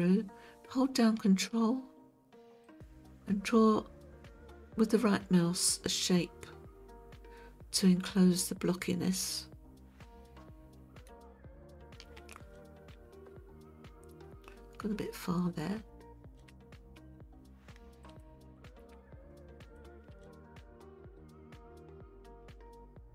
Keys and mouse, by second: 2.6 ctrl+right click, 3.0-11.1 ctrl+right drag, 18.1 alt+shift+click, 19.6 shift+click, 21.2-23.1 middle drag.